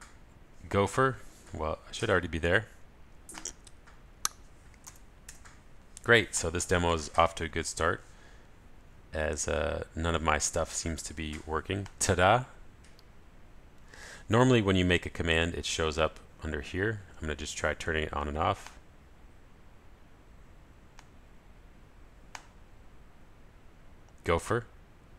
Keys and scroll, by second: 3.4 ctrl+alt+shift+super+f, 4.8 super+a, 25.0 ctrl+alt+shift+super+f.